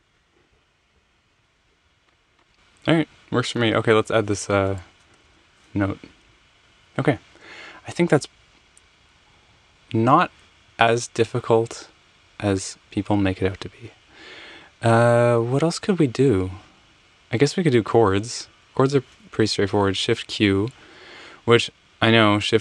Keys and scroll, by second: 0.0 i, 4.6 f, 5.1 Return, 5.9 Escape, 19.8 q.